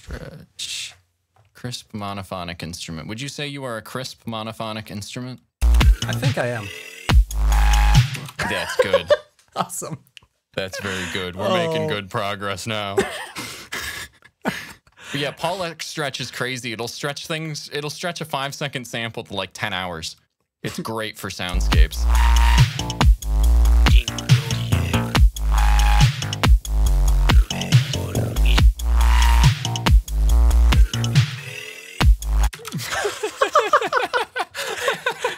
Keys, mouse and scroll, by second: 1.8 click, 5.5 space, 8.0 space, 11.0-11.6 scroll down 2, 11.9-12.5 scroll down 2, 13.0-14.0 scroll up 2, 14.4-14.8 scroll up 2, 15.6-16.0 shift+scroll up 2, 18.3 click, 21.3 space, 32.5 space, 32.7-33.8 shift+scroll down 7.